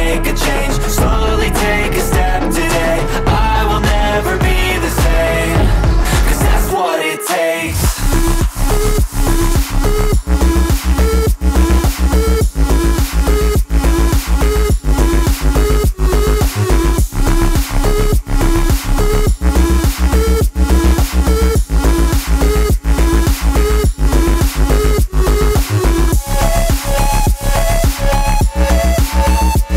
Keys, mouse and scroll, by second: 1.0 double click, 2.0-2.9 typing, 5.0-8.4 typing, 11.5 ctrl+shift+s, 17.5 0.